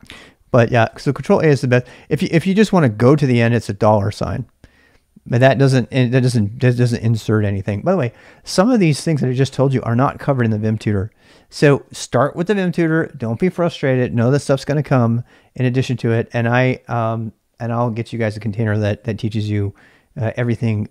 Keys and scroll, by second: 0.9 shift+a, 1.6 ctrl+[, 1.6 ctrl+h, 2.2 h, 2.5 h, 3.2 $, 5.1-8.1 typing.